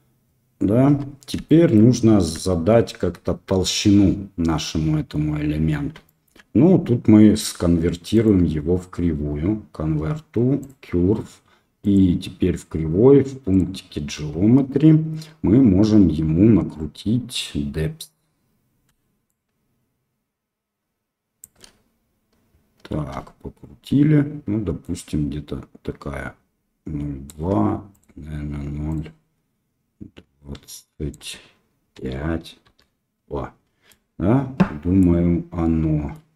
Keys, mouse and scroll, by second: 0.8 Tab, 1.4-1.7 shift+drag, 2.4 shift+drag, 6.0 shift+middle drag, 8.3-10.6 drag, 13.5 click, 28.0-32.9 drag, 33.8-35.0 middle drag, 35.6-36.1 middle drag.